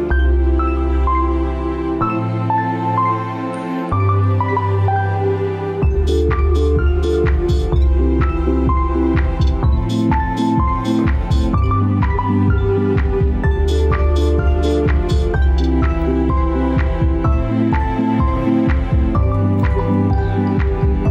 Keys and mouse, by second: 0.3-0.9 middle drag, 1.7-2.2 shift+middle drag, 6.9-7.8 middle drag, 8.1 ctrl+z, 8.5 ctrl+z, 9.8-10.6 middle drag, 11.4 s, 12.9-14.1 right drag.